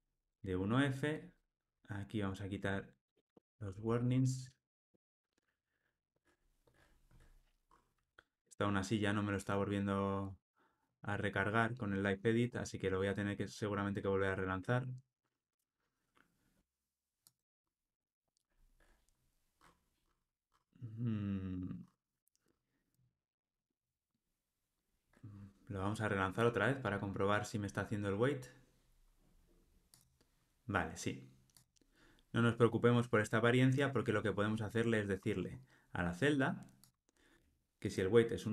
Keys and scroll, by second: 2.7 super+BackSpace, 4.1 ctrl+alt+o, 4.4 alt+super+l, 26.4 ctrl+r, 36.8 super+b.